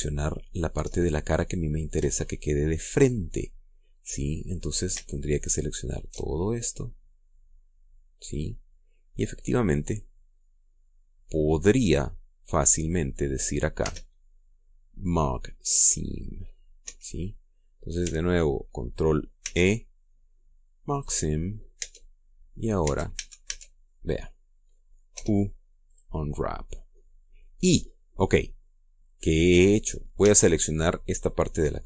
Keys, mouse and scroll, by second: 0.2-0.7 scroll up 3, 0.7 shift+middle click, 3.7-5.3 middle drag, 6.3 alt+shift+right click, 7.0-14.0 alt+shift+middle drag, 14.5 space, 17.5 Escape, 20.1 ctrl+e, 21.7 click, 22.5 Tab, 22.9 scroll down 1, 23.3 middle click, 23.5 Tab, 23.9 a, 24.6 middle click, 25.9 u, 26.6 click, 29.9-31.0 middle drag, 31.0 a.